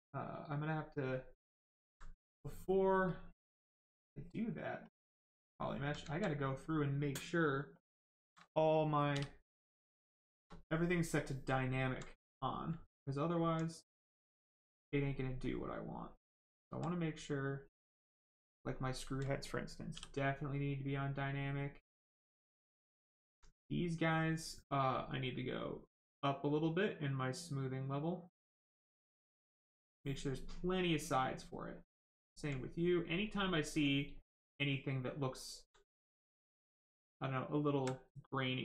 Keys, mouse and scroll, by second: 1.1 click, 1.7 alt+right click, 3.1 right click, 4.8 click, 5.3 alt+right click, 9.6 right click, 10.6 alt+right click, 12.8 right click, 13.2 alt+right click, 15.7 alt+right click, 17.0 right click, 17.0 right click, 18.6 alt+click, 20.4 right click, 23.5 right click, 25.3 click, 28.6 click, 30.6 right click, 33.2 click, 34.6 alt+right click, 35.9 right click, 35.9 right click, 37.0 alt+right click.